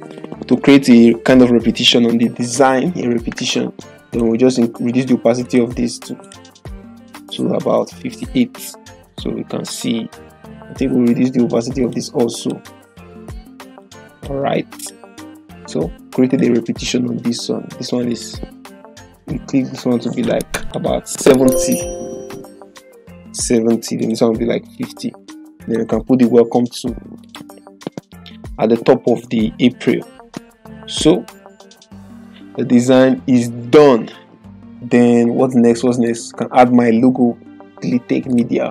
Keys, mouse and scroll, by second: 2.4 click, 11.0 click, 20.8 ctrl+a, 21.7-22.7 typing, 23.9 click, 36.0 click.